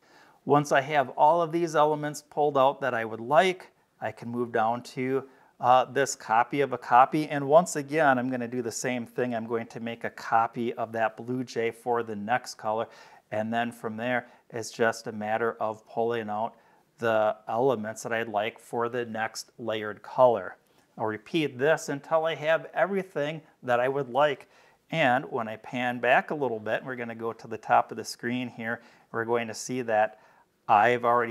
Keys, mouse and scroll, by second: 3.3 space, 3.6-4.8 drag, 5.8-6.8 drag, 9.0 ctrl+v, 10.8-12.2 drag, 12.9-13.4 scroll up 2, 14.8 click, 16.1-17.8 drag, 25.2 middle click, 25.2-25.6 scroll down 1, 26.1 space, 26.3 click, 27.6-28.7 drag, 29.2 middle click, 29.2-29.6 scroll down 4, 29.9 space, 30.1 click.